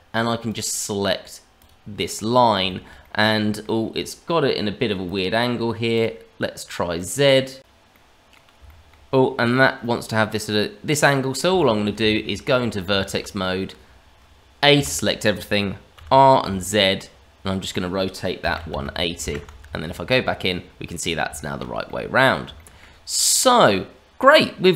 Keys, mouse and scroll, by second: 0.4 click, 2.6 shift+middle click, 3.0 middle click, 5.0 click, 6.9 middle click, 7.9 middle click, 8.6 shift+middle click, 9.1-9.5 scroll up 2, 9.5 middle click, 11.5 middle click, 11.9 Tab, 12.9 shift+middle click, 13.4 middle click, 14.7 a, 15.9 r, 19.6 Tab, 20.9 scroll up 1, 21.3 shift+middle click, 21.8 middle click, 22.5 shift+middle click, 23.5 click.